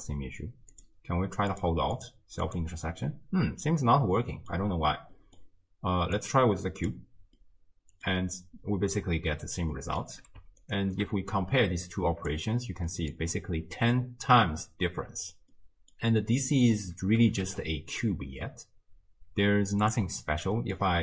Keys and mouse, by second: 0.8 click, 1.6 click, 2.0 click, 2.4 click, 3.1-4.5 middle drag, 5.1 drag, 5.2 middle drag, 6.2-6.9 drag, 7.6-8.1 middle drag, 9.7 middle drag, 11.9 click, 12.9 middle drag, 15.5-16.0 middle drag, 16.7 middle click, 17.2 r, 20.6 middle click.